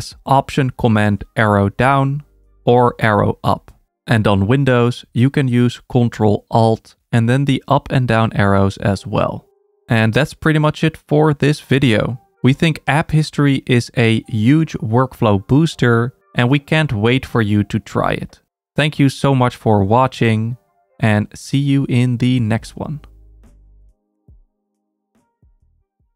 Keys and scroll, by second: 0.8 alt+super+Down, 2.8 alt+super+Up, 4.7 alt+super+Down, 5.3 alt+super+Up, 6.0 alt+super+Down, 6.7 alt+super+Up, 7.4 alt+super+Down, 8.2 alt+super+Up, 8.9 alt+super+Down, 9.7 alt+super+Up.